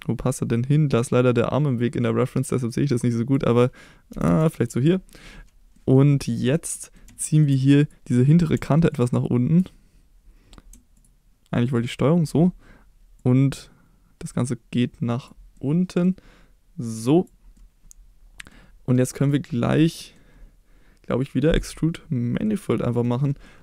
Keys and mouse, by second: 3.1 click, 4.1 g, 4.2 g, 4.6 click, 4.8 middle click, 5.7 middle click, 6.7 middle click, 7.2 shift+middle click, 7.8 click, 8.9 shift+click, 10.9 ctrl+click, 11.8-12.2 ctrl+drag, 13.2-15.2 drag, 15.5 middle click, 16.9 click, 17.5 middle click, 19.0 middle click, 19.9 middle click, 22.4-23.0 middle drag, 23.4 middle click.